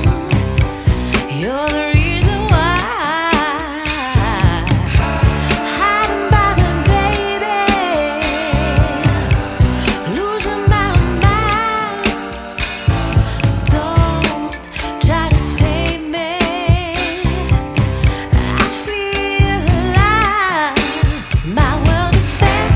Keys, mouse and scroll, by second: 1.2 click, 3.0 click, 3.5 click, 11.2 click, 17.9 t.